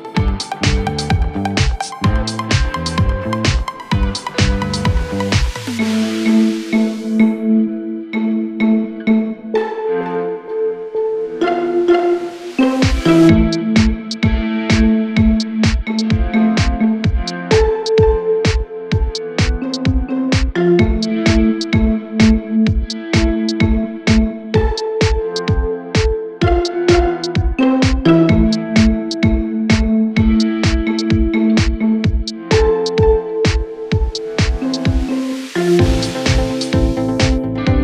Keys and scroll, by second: 0.6-1.7 typing, 5.3-6.2 typing, 28.8-29.9 typing, 33.6-34.4 typing, 37.0-37.8 typing.